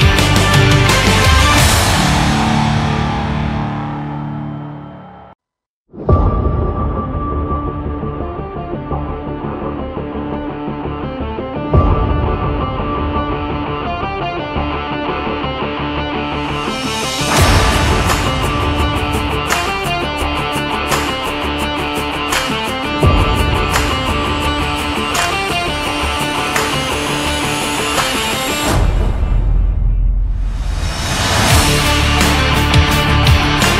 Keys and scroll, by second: 31.9 Down.